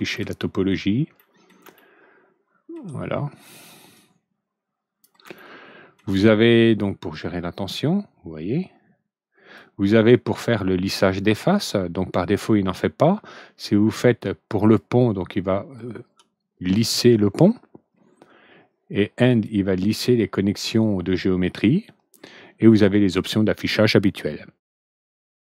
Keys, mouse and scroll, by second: 0.1 ctrl+alt+middle click, 1.1 ctrl+alt+middle click, 1.7 ctrl+alt+middle click, 3.9-5.0 drag, 5.3 ctrl+alt+middle click, 7.5-9.5 drag, 14.6 click, 19.2 click.